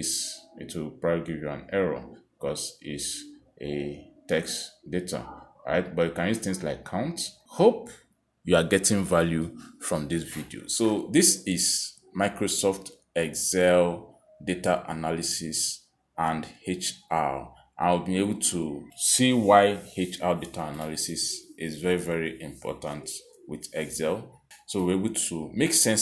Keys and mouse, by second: 0.9 click, 1.9 click, 6.7 click, 8.1 click, 9.6 click, 11.4 click, 13.1 click, 16.0 click, 18.0 click, 18.9 click, 22.8 click, 25.1 click.